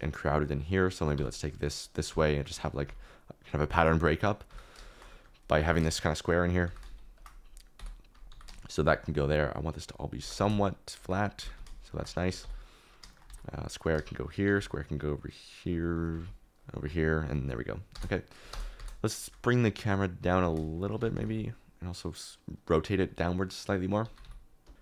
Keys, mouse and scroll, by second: 0.3 shift+click, 1.1 g, 2.0 g, 2.5 click, 2.8 s, 4.4 g, 5.1 middle click, 5.4-8.3 typing, 6.4 middle click, 8.9 shift+click, 10.1 g, 10.3 z, 11.3 g, 11.5 z, 12.4 KP_7, 13.1 shift+middle click, 13.2 alt+d, 14.1 shift+right click, 14.4 alt+d, 15.8 shift+right click, 16.1 alt+d, 17.9 KP_0, 18.5 KP_0, 18.8 KP_0, 20.2-21.3 typing, 24.0 g, 24.2 y, 24.6 Escape.